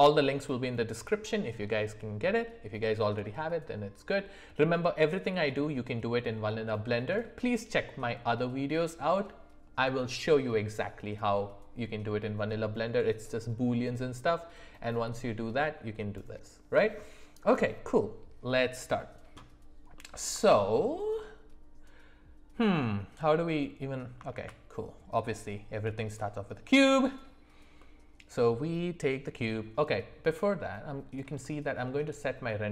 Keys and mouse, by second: 19.9 middle click, 20.4 shift+middle click, 24.3 shift+a, 27.7 middle click, 30.2 middle click, 31.4 shift+middle click, 32.0-32.7 middle drag.